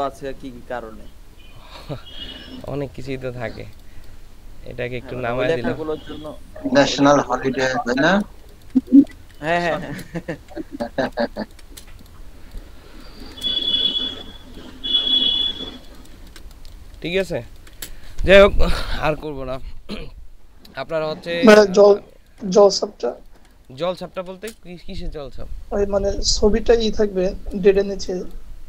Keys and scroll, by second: 8.5 ctrl+space, 11.2 typing, 13.0 ctrl+space, 16.2 ctrl+space, 16.9 ctrl+space, 21.2 ctrl+space, 23.2 space, 27.9 space.